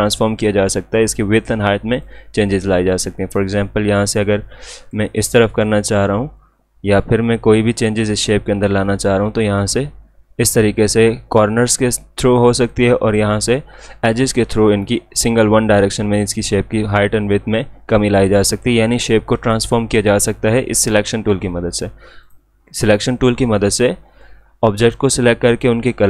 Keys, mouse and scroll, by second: 7.9-9.5 drag, 9.7-11.1 drag, 21.7 click.